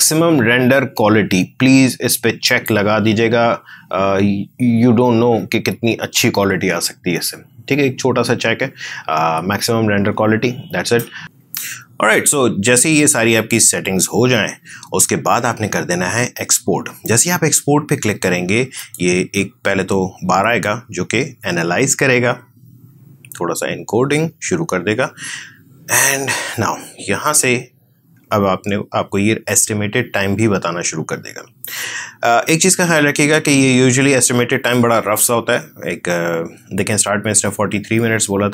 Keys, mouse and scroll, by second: 2.4 click, 11.2 alt+Tab, 18.7 click.